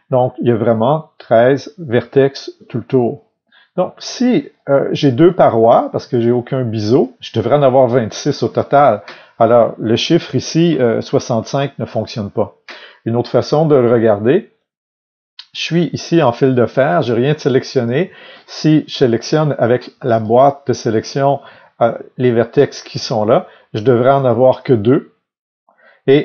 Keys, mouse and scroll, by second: 0.0-17.7 middle drag, 5.0-5.7 scroll up 2, 5.7-6.1 scroll down 2, 13.3 KP_3, 16.5 alt+a, 17.7 click, 19.9 b, 22.9 Escape, 23.4-26.2 middle drag.